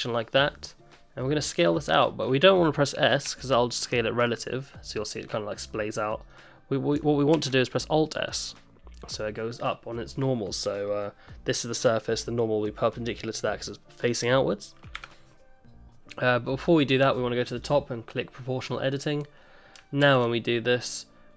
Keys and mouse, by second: 1.2 middle click, 1.9 shift+middle click, 3.3 s, 7.3 alt+s, 17.5 click, 20.0 alt+s.